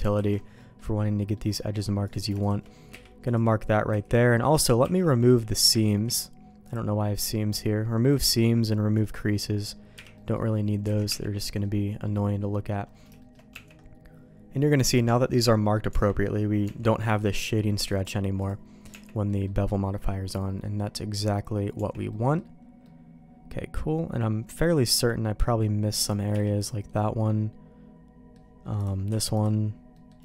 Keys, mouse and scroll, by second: 0.1 alt+a, 0.5 middle click, 1.3 middle click, 2.0 click, 2.4 shift+click, 2.9 q, 3.8 a, 4.8 n, 5.8 ctrl+e, 8.1 click, 9.0 click, 9.9 n, 10.1 middle click, 11.0 alt+a, 11.0 Tab, 11.4 middle click, 12.1 middle click, 13.1 shift+middle click, 13.6 Tab, 15.8 Tab, 16.6 Tab, 17.8 click, 18.3 click, 18.8 Tab, 19.2 middle click, 19.9 middle click, 21.7 Tab, 22.0 middle click, 22.8-25.4 middle drag, 25.9 click, 26.3 q, 26.9-28.3 middle drag, 28.7 click, 29.0 q, 29.9 middle click.